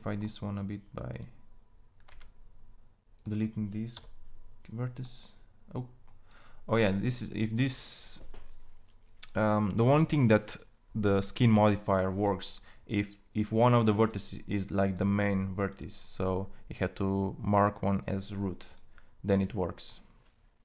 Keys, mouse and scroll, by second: 1.7 g, 3.5 g, 3.5 x, 11.8-15.1 drag, 18.0-19.2 drag.